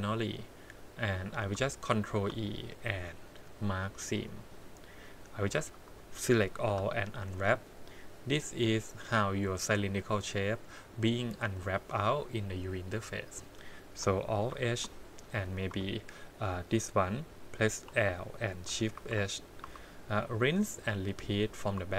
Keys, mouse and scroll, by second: 2.1 ctrl+e, 4.4 click, 4.9 middle click, 5.7 a, 6.7 u, 13.4 click, 14.5 alt+h, 15.2 click, 15.7 3, 17.8 l, 18.9 shift+h, 19.6 2, 20.2 middle click, 20.4 middle click, 21.2 click.